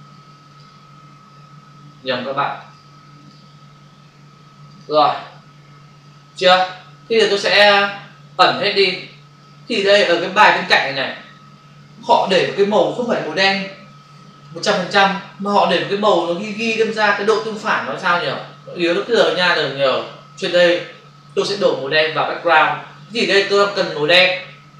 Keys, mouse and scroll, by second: 0.6 click, 2.5 click, 3.1 click, 3.2 double click, 4.6 click, 7.6 click, 10.0 click.